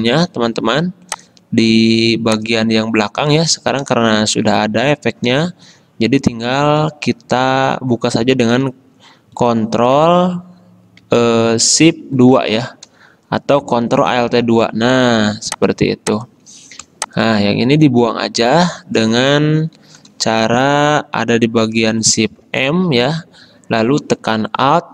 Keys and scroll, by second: 5.5 space, 12.5 ctrl+shift+2, 14.2 ctrl+alt+2, 15.2 v, 22.7 shift+m.